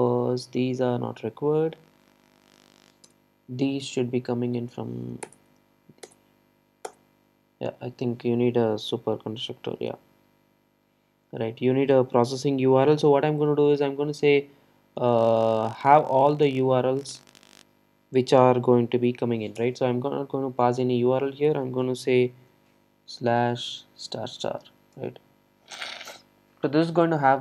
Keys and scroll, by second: 5.3 alt+Return.